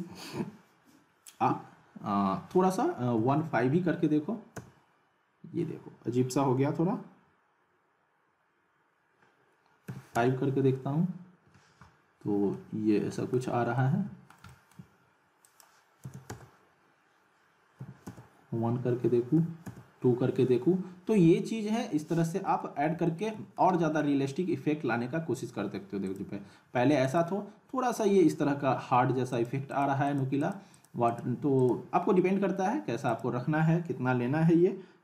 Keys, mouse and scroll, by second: 12.5-13.5 alt+middle click, 13.7 alt+scroll up 1, 14.1 alt+middle click, 15.4 click, 21.7 click, 22.1-22.7 alt+middle click, 22.7-23.0 scroll up 2, 23.0-23.7 alt+middle click, 26.1 click, 29.3 click.